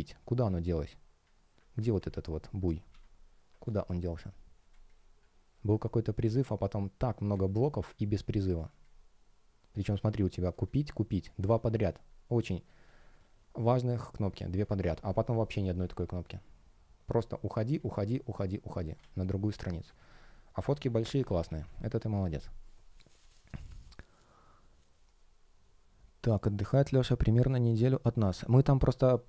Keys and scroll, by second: 1.6 super+z, 3.5 space, 8.4 space, 12.7 space, 20.5 super+w, 21.5 super+w.